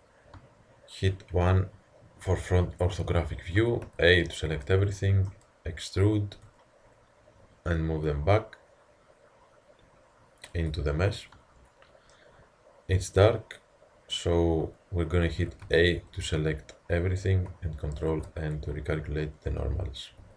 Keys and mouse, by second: 1.3 KP_1, 3.6 a, 3.9 a, 4.3-6.4 middle drag, 6.4 e, 11.2 middle drag, 15.4 a, 15.7 a, 18.0 ctrl+n, 20.2 a.